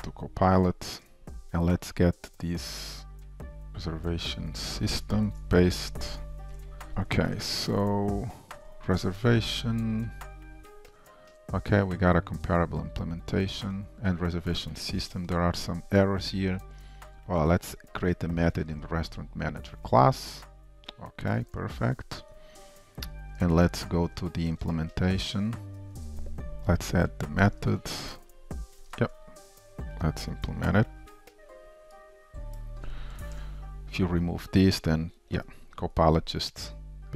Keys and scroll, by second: 5.5 ctrl+v, 6.8 shift+super+F12, 15.2 F2, 23.5 ctrl+shift+Up, 26.6 alt+super+b, 35.4 Tab.